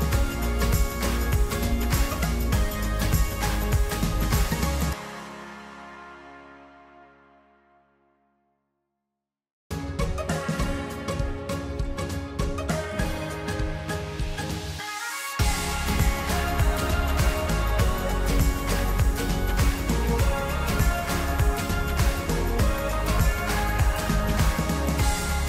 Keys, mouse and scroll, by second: 0.5-6.2 middle drag, 6.5-8.0 scroll up 1, 9.9 alt+shift+click, 10.8-11.3 shift+middle drag, 11.6 alt+shift+click, 12.0 alt+shift+click, 12.5 middle click, 13.4 middle click, 13.5 scroll up 1, 14.1 alt+shift+click, 15.1 alt+shift+click, 15.3 middle click, 16.1 alt+shift+click, 16.4 alt+shift+click, 16.7 alt+shift+click, 16.8 middle click, 17.3 alt+shift+click, 17.8 alt+shift+click, 18.0 middle click, 18.6 alt+shift+click, 19.1 alt+shift+click, 19.2 middle click, 19.8 alt+shift+click, 19.9 middle click, 22.1 scroll down 3, 22.2 middle click, 22.6 scroll up 3, 22.7 middle click, 23.1 scroll down 1, 23.1-25.4 middle drag.